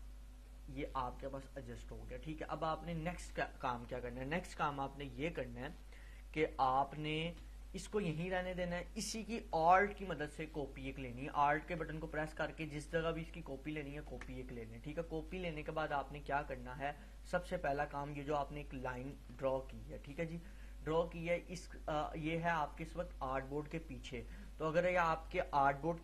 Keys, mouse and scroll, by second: 4.8-6.5 scroll down 1, 6.9 click, 7.1-7.5 space, 7.7 click, 10.9-14.0 alt+drag, 15.5-15.8 drag, 17.3-18.5 drag, 19.3 space, 19.6 click, 19.8-20.3 space, 21.0-22.2 drag, 24.9 click.